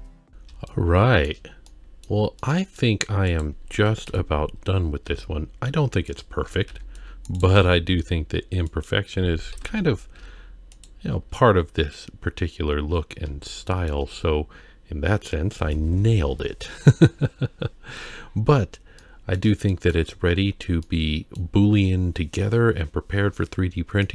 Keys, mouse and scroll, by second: 0.0 click, 0.3 scroll down 2, 0.7-1.3 shift+middle drag, 1.6-2.0 middle drag, 2.4-2.8 middle drag, 3.3 click, 4.0 KP_3, 4.6-5.0 scroll up 2, 5.0 Tab, 5.5 z, 6.4 alt+a, 6.7 c, 7.5 g, 9.5 KP_1, 10.1 z, 11.3 scroll down 1, 12.2-12.6 scroll up 1, 13.1-13.4 scroll down 1, 13.4 shift+middle click, 14.1-15.3 scroll down 2, 17.6-18.7 scroll up 3, 19.0 shift+middle click, 19.7 middle click, 20.1 Tab, 20.4-20.8 scroll down 1, 20.8-21.4 middle drag, 24.0 middle click.